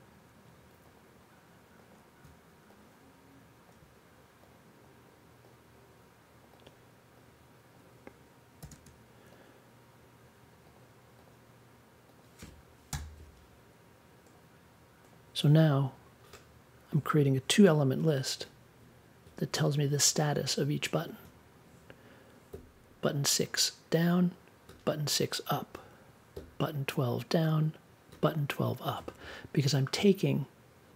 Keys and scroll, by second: 8.6 r, 8.7 space, 12.9 m.